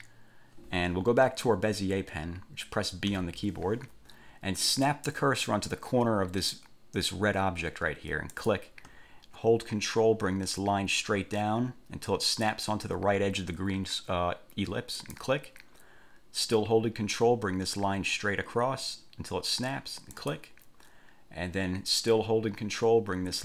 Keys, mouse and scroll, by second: 3.3 b, 8.5 click, 15.1 ctrl+click, 20.3 ctrl+click.